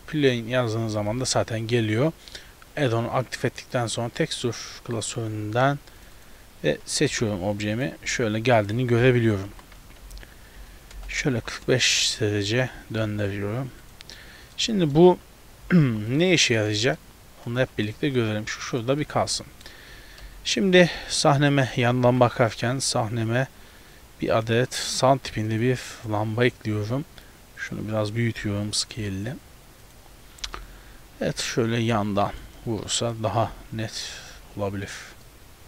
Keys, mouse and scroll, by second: 6.6 click, 7.1 g, 8.1 s, 9.3 r, 11.4 g, 13.0 s, 14.2 middle click, 14.8 shift+middle click, 15.7 g, 16.5 shift+middle click, 16.7 middle click, 17.6 g, 19.1 a, 19.3 a, 19.4 middle click, 20.5 KP_1, 21.7 click, 22.1 shift+a, 24.9 r, 25.7 g, 26.8 s, 28.4 s, 29.0 g, 30.5 KP_7, 31.4 r, 32.0 g, 33.8 r, 35.0 g, 35.3 middle click.